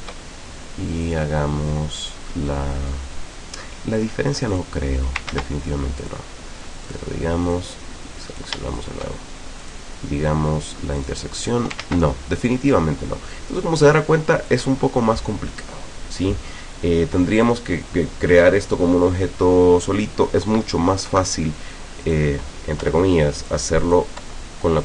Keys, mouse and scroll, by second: 1.1 click, 4.5 click, 5.3 ctrl+z, 6.1 click, 6.9 click, 7.5-8.6 drag, 8.8 shift+click, 9.7 click, 11.0 click, 11.8 ctrl+z, 12.7 click, 13.8 click, 14.5 click, 17.7 click, 21.1 Delete, 22.1 click, 22.8 Delete, 23.4 click, 23.8 click, 24.2 Delete.